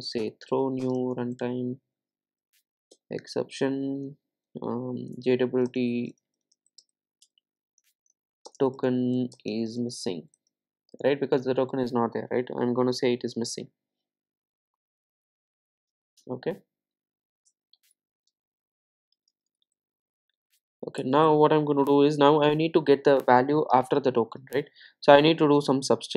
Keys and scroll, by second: 0.2 Return.